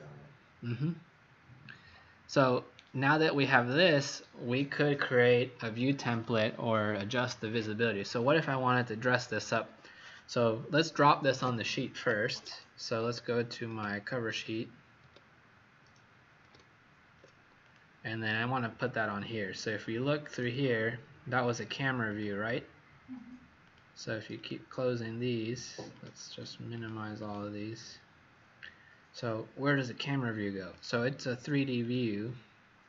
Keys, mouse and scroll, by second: 1.8 scroll up 2, 3.1 scroll down 1, 12.2 ctrl+Tab, 13.6 ctrl+Tab, 14.2 ctrl+Tab, 15.0 ctrl+Tab, 17.7 click, 19.6 click, 21.4 click, 22.0 click, 23.6 click, 27.2 click, 28.2-29.2 scroll down 4, 29.2-29.9 scroll up 3, 30.7 click.